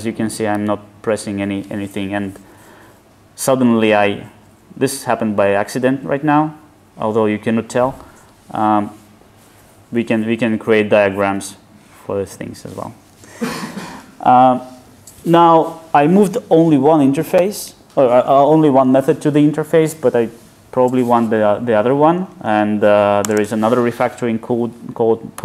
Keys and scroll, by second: 0.4 alt+super+u.